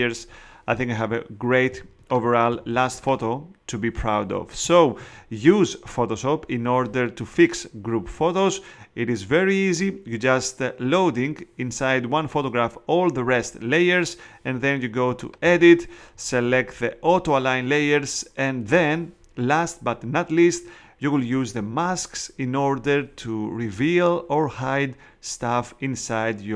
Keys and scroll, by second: 1.7 space, 4.6 space.